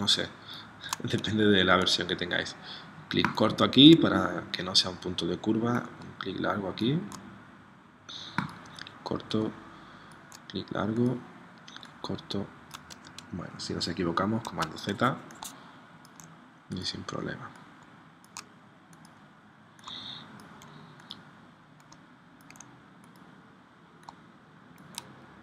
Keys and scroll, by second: 14.4 super+z.